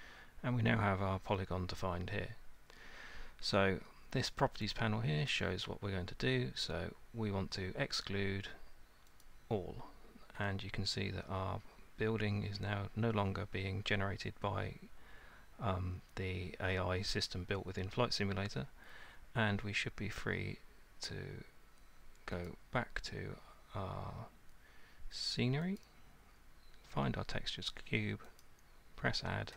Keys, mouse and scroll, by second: 2.4 Return, 5.3 click, 9.2 click, 22.5 click, 25.8 click, 28.4 click.